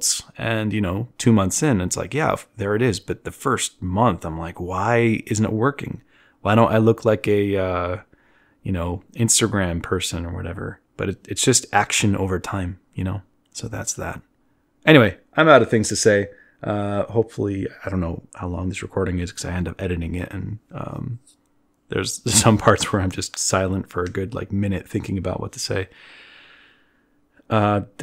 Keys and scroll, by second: 6.1 z, 7.3 z, 8.0 b, 8.4 b, 8.9 b.